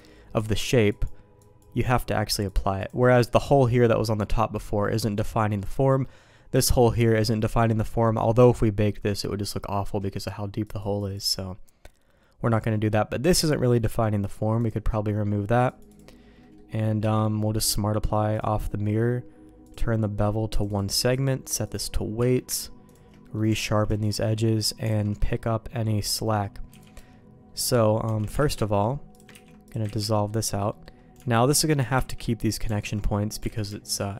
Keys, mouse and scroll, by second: 0.3 click, 1.3 click, 2.5 click, 3.1 middle click, 4.8 middle click, 5.8 middle click, 7.5 middle click, 9.0 middle click, 10.6 click, 10.9 click, 12.6 middle click, 15.6 click, 15.8 click, 16.3 middle click, 16.9 q, 19.6 click, 20.5 click, 21.1 click, 22.1 q, 23.1 middle click, 23.4 Tab, 23.9 shift+middle click, 24.9 alt+a, 25.1 middle click, 25.9 middle click, 26.6 b, 28.0 Tab, 28.4 alt+a, 29.1 click, 29.2 ctrl+x, 29.6 click, 29.8 ctrl+x, 30.1 middle click, 30.6 middle click, 31.9 ctrl+x, 32.7 click, 33.5 alt+a, 33.8 alt+click.